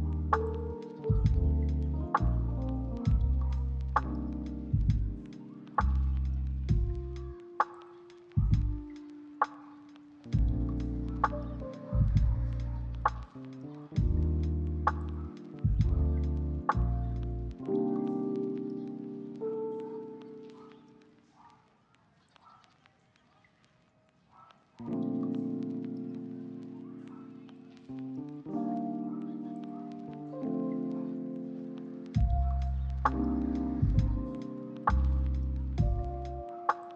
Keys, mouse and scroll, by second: 2.2 z, 3.9 double click, 5.6 g, 8.0-8.5 scroll down 1, 9.0 shift+middle click, 11.4-12.6 scroll down 3, 12.6 shift+middle click, 13.3-13.7 scroll up 1, 14.4 scroll down 1, 14.9 shift+middle click, 16.8 Tab, 18.0 middle click.